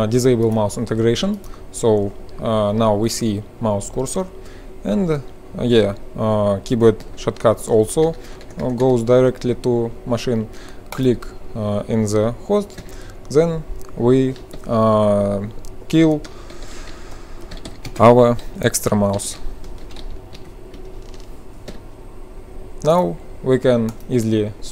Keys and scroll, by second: 4.1 F12, 6.2 F12, 8.0 BackSpace, 8.1 BackSpace, 8.3 BackSpace, 8.5 BackSpace, 12.8 F12, 14.5 l, 15.7-22.1 typing, 17.4 ctrl+l, 23.9-24.6 typing.